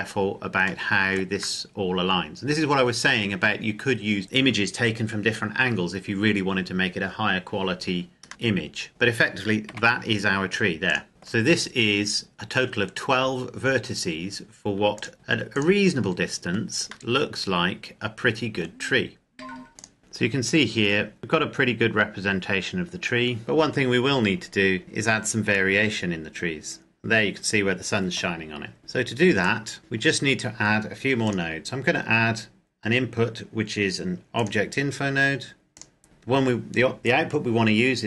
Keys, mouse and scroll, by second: 0.6 shift+middle click, 8.3 middle click, 9.8 g, 10.6 click, 11.0 scroll down 1, 11.1 middle click, 12.3-13.4 scroll down 1, 13.4 scroll up 1, 14.7 click, 16.9 middle click, 19.9 click, 20.9 middle click, 21.2 scroll up 1, 21.6-23.4 scroll down 1, 25.8 middle click, 28.8 click, 29.8 n, 29.8-31.1 scroll up 1, 31.1 click, 34.3 click.